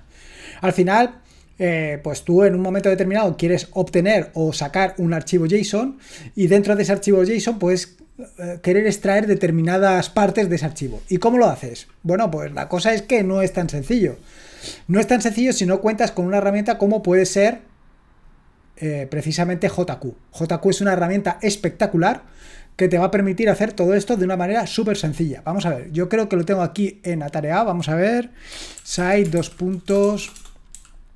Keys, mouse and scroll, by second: 27.3 click, 28.3-31.1 typing.